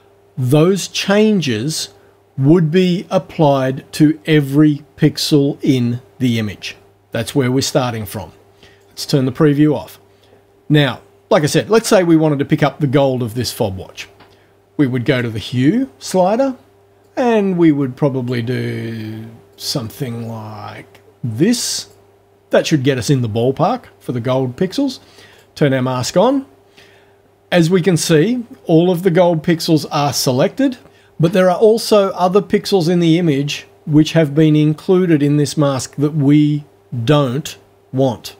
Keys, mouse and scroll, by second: 8.7 click, 15.1 click, 17.1-18.5 drag, 19.5-22.1 drag, 25.3 click.